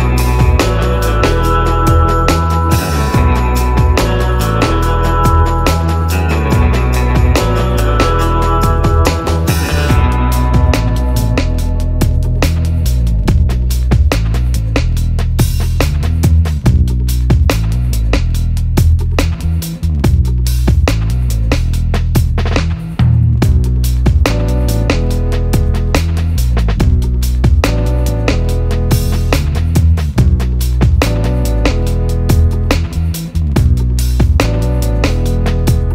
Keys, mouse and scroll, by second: 0.0-0.7 typing, 0.6 middle click, 0.7 middle click, 2.0 typing, 2.4-6.0 drag, 7.0 Tab, 7.0-7.4 typing, 9.1-9.8 typing, 9.3 middle click, 11.9 click, 18.9 click, 21.1 click, 25.2-25.9 typing, 28.0-29.2 typing, 28.3 click, 29.2 right click, 32.2 click.